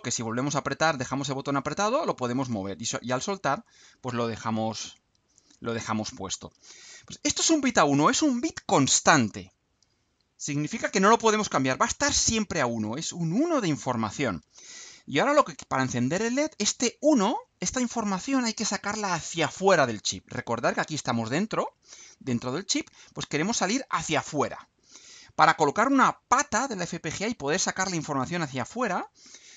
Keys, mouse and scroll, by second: 0.6-3.2 drag, 5.2-6.0 drag.